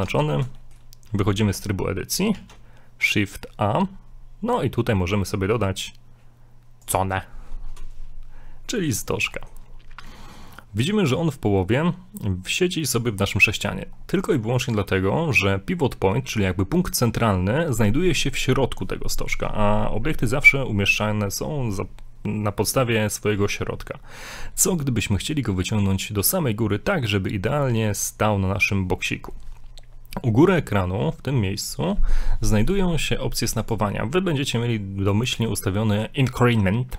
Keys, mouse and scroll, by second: 0.0 Tab, 0.6 shift+middle click, 2.3 shift+a, 8.5 scroll down 2, 8.7 middle click, 9.3 shift+middle click, 10.2 shift+middle click, 14.0-14.6 scroll up 2, 14.7 middle click, 25.5-26.1 scroll down 1, 33.6 click.